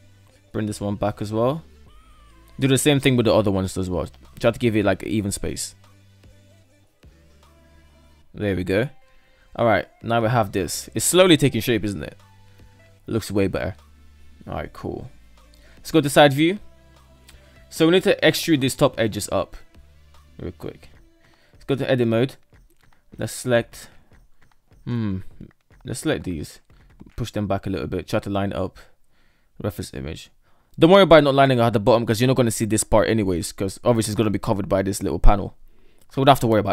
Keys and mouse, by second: 0.2 g, 2.4 right drag, 2.7 shift+right click, 3.4 g, 5.5 right click, 5.7 g, 6.4 g, 7.0 right click, 7.1 g, 7.7 alt+z, 8.0-8.7 middle drag, 9.0 shift+middle click, 9.2 Tab, 9.8-11.5 middle drag, 13.9 KP_3, 15.1 shift+middle click, 15.8 shift+middle click, 20.5 Tab, 21.5 shift+middle drag, 22.5 shift+middle drag, 23.5 shift+middle click, 24.3 right click, 24.7 alt+right click, 25.8 g, 29.4 shift+middle click, 30.3 right click, 30.6 shift+right click, 31.2 g, 36.2 shift+middle click.